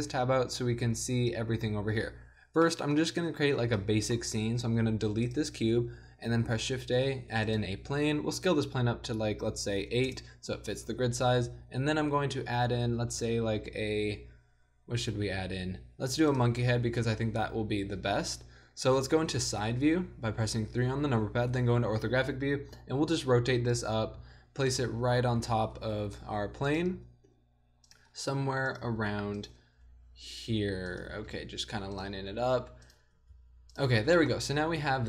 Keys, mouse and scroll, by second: 2.7-5.0 middle drag, 5.0 x, 5.4-6.2 drag, 6.5 shift+a, 8.6 s, 10.9 click, 11.5 a, 13.0 shift+a, 19.0 KP_1, 19.4 KP_3, 21.5 KP_5, 22.7 r, 24.2 g, 25.4 z, 25.8 r, 26.9 g, 28.1 r, 28.8 g, 29.6 r, 31.1 g, 32.2 r, 33.1 g, 34.2 middle drag, 34.8 KP_0.